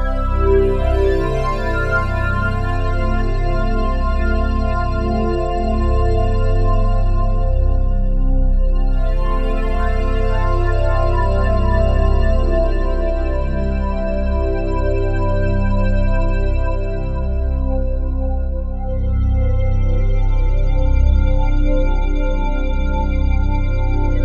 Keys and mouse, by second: 0.2 shift+click, 0.2-1.1 typing, 1.7 click, 2.4 click, 2.8 typing, 4.7-5.5 typing, 5.2 click, 7.8-8.6 typing, 9.0-10.5 drag, 9.9 typing, 11.7-12.4 typing, 12.9 click, 13.5 typing, 16.9 space, 17.3 click, 17.8 space, 21.0 space, 21.6 ctrl+s.